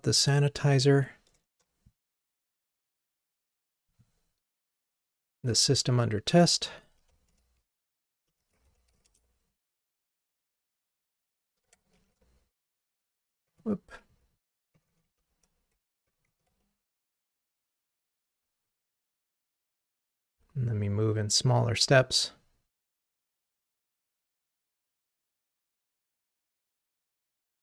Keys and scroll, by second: 4.5 super+c, 5.5 super+v, 20.0 ctrl+r.